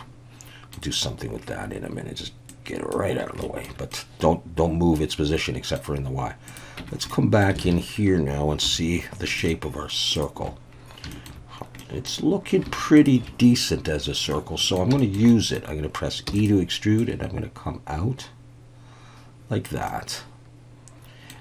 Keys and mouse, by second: 2.5 click, 3.4 shift+middle drag, 3.9-5.8 middle drag, 6.8 Tab, 7.1 middle click, 7.6 alt+a, 9.2 2, 9.4 alt+shift+click, 11.1 shift+middle click, 11.8 middle click, 13.0 alt+shift+click, 14.3 middle click, 15.0 shift+middle click, 15.3 middle click, 16.3 e, 16.3-19.6 drag, 19.9-21.3 middle drag.